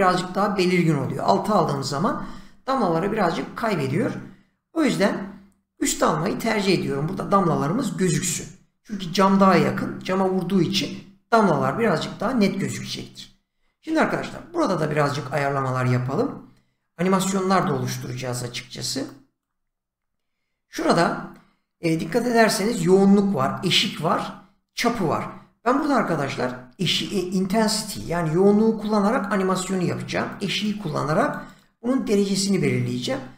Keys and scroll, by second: 27.9 <.